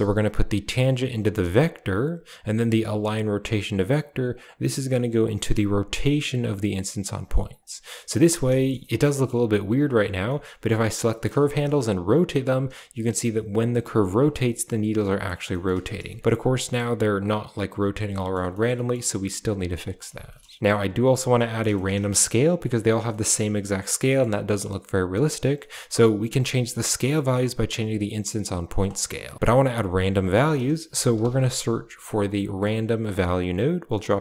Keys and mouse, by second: 0.3-1.2 drag, 1.5 click, 4.4-7.0 drag, 8.0 middle drag, 8.6 shift+middle click, 8.7 middle drag, 9.1 shift+middle click, 9.7 right click, 9.9 Tab, 10.2 middle click, 11.1 shift+middle click, 11.4 r, 14.2 g, 15.5 shift+middle click, 15.8 middle click, 16.1 middle click, 16.5 middle click, 18.2 middle click, 18.8 middle click, 19.2 r, 19.5 g, 20.0 Tab, 20.3 middle click, 20.5 shift+middle click, 21.7 middle drag, 21.9 a, 23.0 shift+middle click, 23.9 middle click, 24.3 middle click, 25.5 middle click, 26.2-28.6 shift+drag, 28.8 middle click, 29.3 click, 30.3 shift+a, 33.1 shift+a.